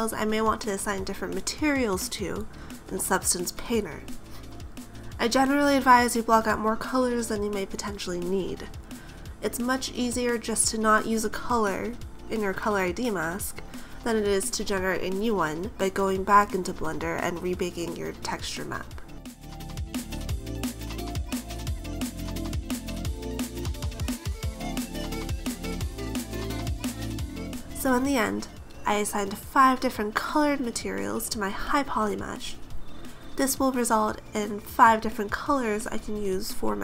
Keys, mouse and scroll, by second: 0.7 click, 0.9 click, 1.0 typing, 1.6 Return, 1.6 click, 1.9 click, 2.4 middle click, 2.6 a, 2.7 right click, 3.3 shift+right click, 3.6 shift+right click, 3.9 click, 4.4 click, 4.7 ctrl+z, 4.8 ctrl+j, 5.5 click, 5.8 Tab, 6.4 ctrl+Tab, 6.6 ctrl+z, 7.0 right click, 7.3 click, 7.5 click, 7.7 click, 8.0 click, 8.3 click, 8.6 click, 9.0 click, 9.1 click, 9.3-10.2 typing, 10.2 Return, 10.2 middle click, 10.7 right click, 11.0 click, 11.2 click, 11.5 right click, 12.0 click, 12.3 right click, 12.6 click, 12.9 click, 13.0 middle click, 13.2 a, 13.6 middle click, 14.0 right click, 14.8 click, 15.5 click, 15.8 middle click, 15.9 a, 16.0 right click, 16.4-16.8 click, 16.5 click, 16.6 click, 17.0 typing, 17.5 Return, 17.5 click, 17.8 click, 18.1 click, 18.1 click, 18.2 click, 18.3 click, 18.4 click, 18.6 BackSpace, 19.1 Return, 19.1 click, 19.1 3, 19.4 click, 19.7 click, 20.6 middle click, 20.9-21.6 scroll up 2, 20.9 a, 21.1 right click, 21.7 shift+right click, 21.8 shift+right click, 22.1 shift+right click, 22.3 ctrl+j, 22.7 click, 22.8 click, 23.0 click, 23.2 click, 23.3 click, 23.4 typing, 24.1 Return, 24.1 click, 24.3 click, 25.5 a, 25.6 middle click, 25.9 right click, 27.3 right click, 27.6 click, 28.0 click, 28.5 right click, 28.8 click, 29.3 click, 29.9 right click, 30.3 click, 30.6 click, 30.8 a, 31.0-31.4 scroll down 3, 31.2 middle click, 35.3 KP_7, 36.0 right click, 36.7 click.